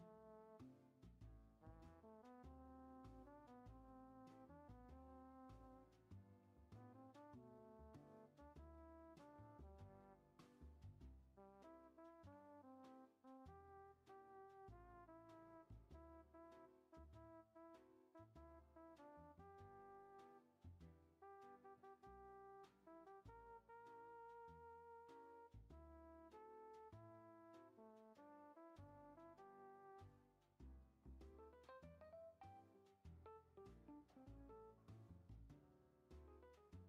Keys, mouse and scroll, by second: 0.4-2.9 drag, 2.9-6.5 shift+middle drag, 6.8-9.4 drag, 10.1 i, 11.1-16.1 drag, 16.8 space, 18.5-19.9 drag, 23.9-25.1 drag, 25.6 space, 28.4-30.5 drag, 30.5-30.9 shift+middle drag, 30.9 scroll down 1, 32.4 r.